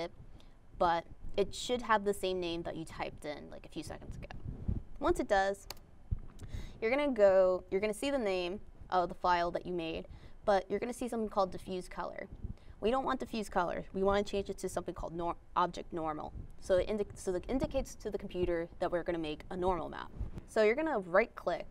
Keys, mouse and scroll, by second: 21.1 click.